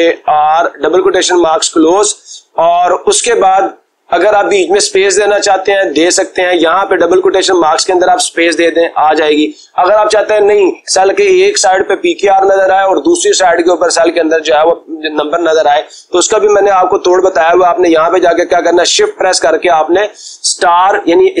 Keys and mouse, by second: 0.6 r, 6.8 Left, 17.1 BackSpace, 17.5 Right, 19.8 *.